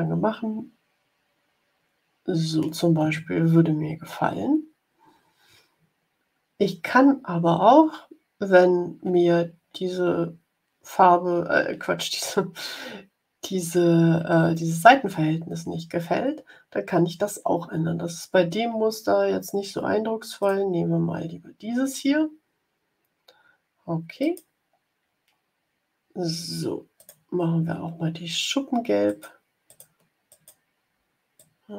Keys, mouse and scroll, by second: 0.3 scroll up 2, 1.6 scroll up 2, 3.3-5.3 drag, 20.3 click, 24.1 click, 24.6 scroll down 1, 25.1-25.8 scroll down 2, 26.9 click, 29.0 click, 29.6 click, 30.2 click, 31.3-31.7 drag.